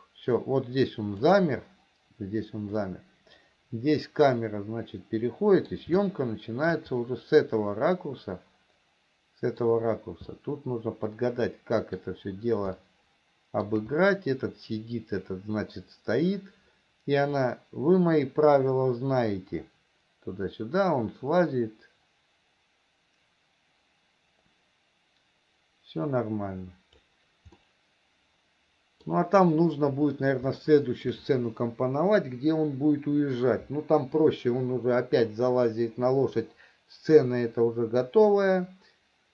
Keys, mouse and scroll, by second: 3.0-6.1 middle drag, 6.4 shift+middle click, 7.9-10.1 middle drag, 10.7-12.3 middle drag, 13.2 shift+middle click, 17.7-27.5 drag, 27.9-29.5 middle drag, 31.0 shift+middle click.